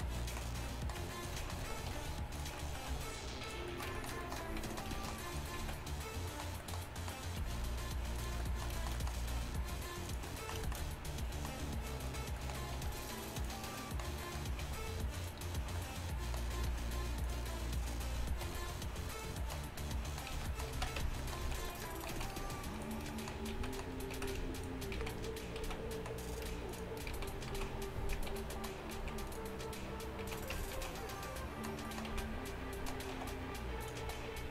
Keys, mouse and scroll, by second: 2.0 k, 2.4 r, 2.9 g, 4.5 z, 5.6 z, 7.5 g, 9.4 e, 12.9 r, 14.7 g, 17.3 r, 18.5 r, 20.3 z, 20.8 z, 21.1 Tab, 21.5 z, 22.2 z, 23.6 z, 24.3 z, 24.9 click, 25.0 z, 25.7 z, 26.1-27.2 drag, 27.2 z, 27.6 z, 28.4 shift+h, 29.0 z, 30.3 z, 30.6 Tab, 30.8 z, 32.2 z, 33.2 s, 34.1 e.